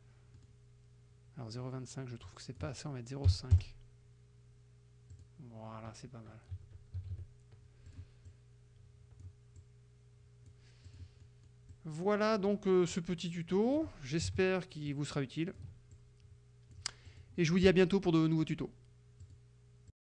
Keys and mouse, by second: 0.4 middle click, 2.3 click, 3.4 KP_5, 3.6 KP_Enter, 5.2 click, 6.6 KP_Subtract, 7.9 click, 8.3-9.4 drag, 9.7-10.7 drag, 10.9 click, 11.2 middle click, 11.8-12.7 drag, 13.0 click, 14.9-15.8 ctrl+drag, 16.0-16.9 ctrl+drag, 17.1 click, 19.3 click, 20.0 click.